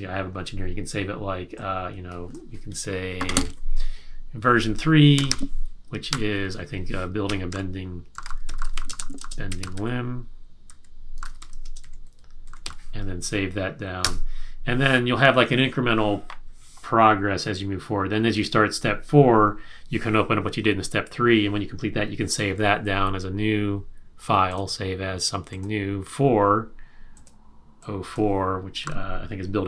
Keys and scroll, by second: 4.9-13.1 typing, 14.0 Return, 28.8 4.